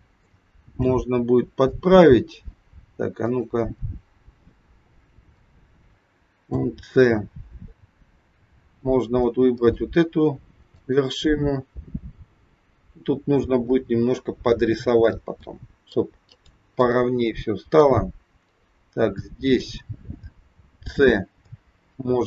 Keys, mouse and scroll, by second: 0.3 shift+middle click, 1.7 middle click, 3.2 click, 6.4 c, 16.8 middle click, 16.8 scroll up 1, 18.7-19.2 scroll down 2, 19.2 middle click, 20.6 c.